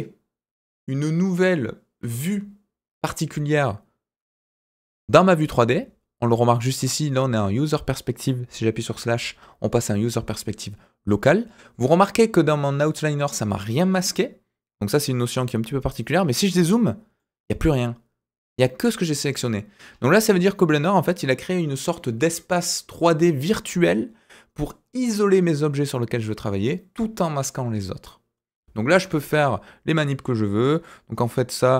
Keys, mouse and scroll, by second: 16.2-17.1 scroll down 5, 17.1-19.8 middle drag, 19.8-23.3 scroll up 4, 29.3 click, 30.8 click.